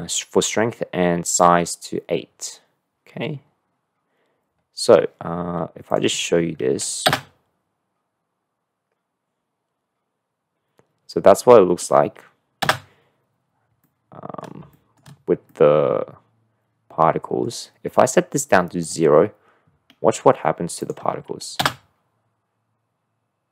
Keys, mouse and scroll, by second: 6.1 click, 7.0 space, 13.1 space, 13.9-14.4 middle drag, 14.8 shift+middle click, 14.8 click, 15.5 middle drag, 15.5 click, 15.7 middle drag, 15.7-16.1 drag, 15.9 middle click, 16.1-17.5 middle drag, 16.9 click, 18.8 click, 20.8 click, 21.5 space.